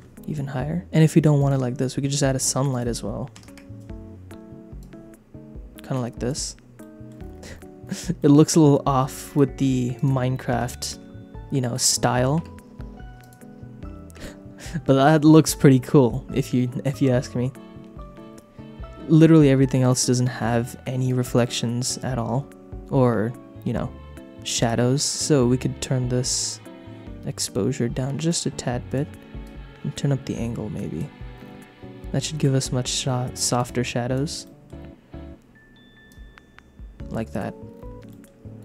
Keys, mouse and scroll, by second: 1.3 click, 2.7-6.3 drag, 6.7 middle click, 8.2 middle click, 8.6 r, 9.2 click, 9.6 g, 10.0 click, 10.5 KP_0, 12.4 space, 13.3 click, 14.2 space, 16.1 shift+middle click, 19.8 click, 21.0-24.6 drag, 26.5-28.9 drag, 29.4-31.0 drag, 33.6 click, 34.4 shift+middle click, 36.1-37.3 drag, 38.0 shift+middle click.